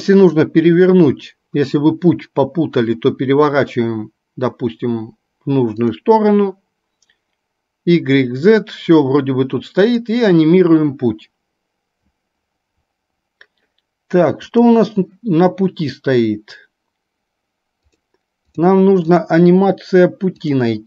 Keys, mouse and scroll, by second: 0.3 click, 5.9 click, 9.9 click, 14.5 click, 17.9 click.